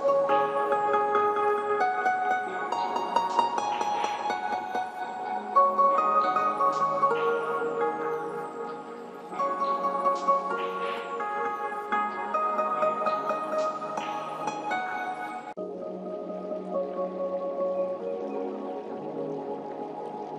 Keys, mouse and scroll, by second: 6.5-11.3 drag, 11.8-20.3 drag.